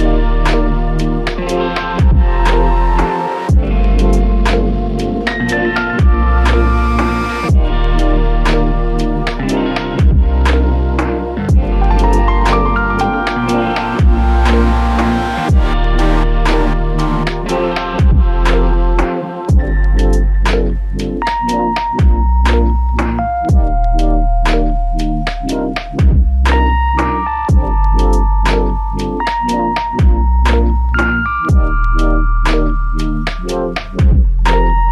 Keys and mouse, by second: 7.4 alt+click, 8.3 shift+click, 11.3 alt+click, 17.8 alt+click, 21.7 alt+click, 26.5 alt+click, 28.7 double click, 31.6 alt+click, 33.8 double click, 34.7 alt+click.